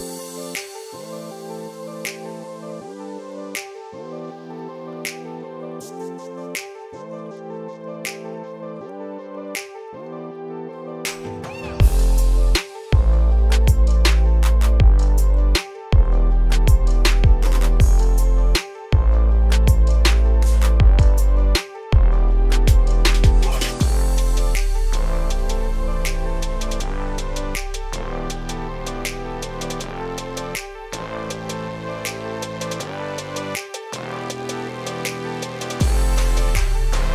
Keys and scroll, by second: 2.0 ctrl+space, 7.5 ctrl+g.